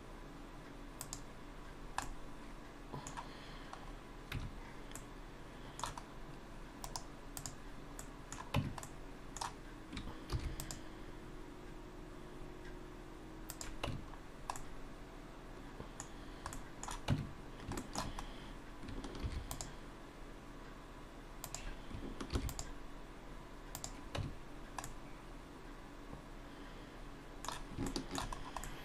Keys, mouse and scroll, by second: 1.7-2.0 scroll down 2, 2.0 middle click, 3.9 scroll up 1, 4.4 Tab, 5.0 middle click, 6.1-6.8 scroll up 1, 6.8 right click, 8.0 middle click, 8.6 Tab, 8.9 middle click, 10.3 ctrl+r, 13.9 Tab, 14.2-14.6 scroll down 2, 14.6 middle click, 16.2-16.6 scroll down 1, 16.6 middle click, 17.1 Tab, 17.8 shift+middle click, 19.2 ctrl+r, 24.2 Tab, 24.6 scroll down 1, 24.9 middle click, 28.4-28.8 scroll up 2, 28.6 middle click.